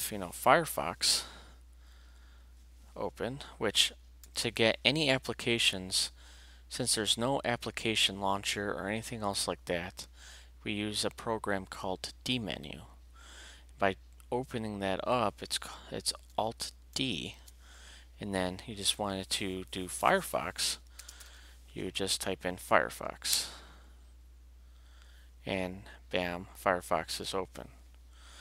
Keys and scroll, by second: 4.2 alt+d, 16.9 alt+d, 20.7-21.7 typing, 23.3 Return.